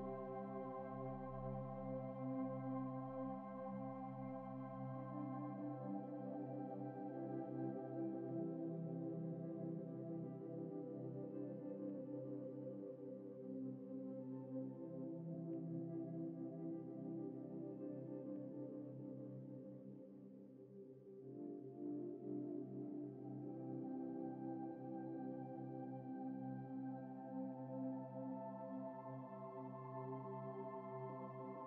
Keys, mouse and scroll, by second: 2.4 alt+Tab, 2.5 alt+Tab, 3.2 double click, 10.6 double click, 11.3 middle click, 11.9 scroll up 1, 12.2 shift+middle click, 13.2-14.9 scroll down 2, 13.4 middle click, 15.4 ctrl+F3, 16.5 ctrl+F4, 17.0 middle click, 20.3 alt+Tab, 20.9 alt+Tab, 20.9 alt+Tab, 21.3 alt+Tab, 22.1-22.4 scroll down 1, 22.4-22.9 scroll up 1, 22.9 scroll down 1, 23.0 scroll up 1, 23.1 scroll down 1, 23.7 ctrl+-, 23.9 ctrl+-, 24.2 space, 24.7 alt+Tab, 25.0 alt+Tab, 27.0 alt+Tab, 27.2 alt+Tab, 27.7 alt+shift+Tab, 29.4 alt+Tab, 30.9 alt+Tab.